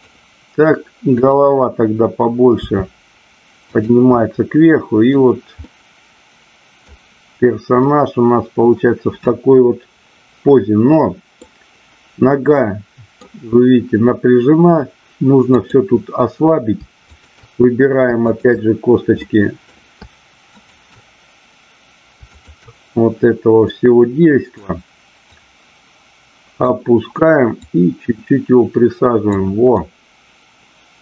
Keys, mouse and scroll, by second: 2.5 r, 3.8 click, 4.2-5.1 middle drag, 5.6-6.9 middle drag, 7.8-11.3 middle drag, 12.6 middle click, 15.6-16.2 drag, 17.1 shift+click, 18.3-19.1 shift+drag, 19.2-19.6 middle drag, 20.6-21.7 shift+drag, 22.4-23.1 shift+drag, 23.7-24.6 middle drag, 25.2-26.7 drag, 27.6-29.3 drag, 29.8-31.0 middle drag.